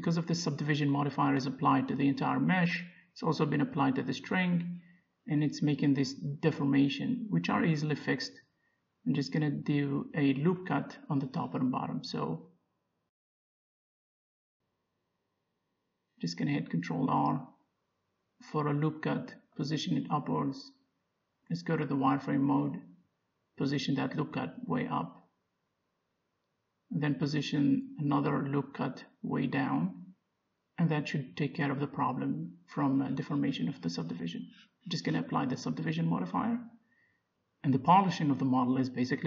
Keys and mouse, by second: 1.1 z, 1.5 middle click, 2.7 ctrl+r, 3.5-5.2 drag, 5.8-7.5 right drag, 6.6 click, 7.5 middle click, 7.9 z, 9.3 middle click, 9.5 middle click, 11.1 middle click, 11.2 Tab, 11.6 Tab, 13.1 Tab, 14.1-16.9 middle drag, 15.8 ctrl+r, 22.4-25.3 middle drag, 22.9 z, 25.6 g, 28.1-29.2 middle drag, 29.5 ctrl+r, 30.0-32.4 middle drag, 33.0 middle click, 33.8 Tab, 34.5 z, 35.9 Tab, 38.4-39.2 drag.